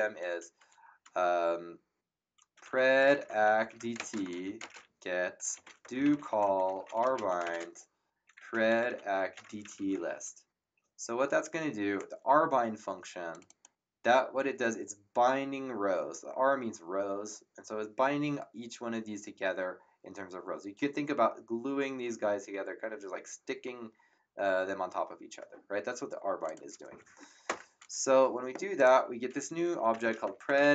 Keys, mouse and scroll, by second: 2.4-10.4 typing, 13.3 click, 26.4 click, 27.4 Return, 28.7 click, 29.7-30.7 typing.